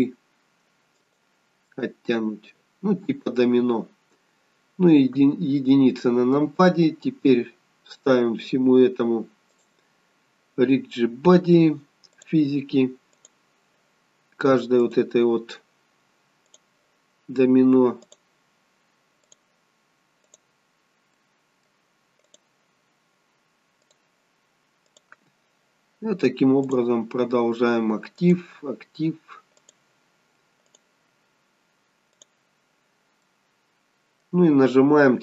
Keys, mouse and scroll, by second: 1.6 middle click, 5.1 KP_1, 9.5 click, 12.1 click, 13.1 click, 14.7 click, 16.4 click, 17.9 click, 19.2 click, 20.1 click, 21.1 middle click, 22.1 click, 23.7 click, 24.8 click, 26.6 click, 28.1 click, 29.5 click, 30.5 click, 32.1 click, 33.1 middle click.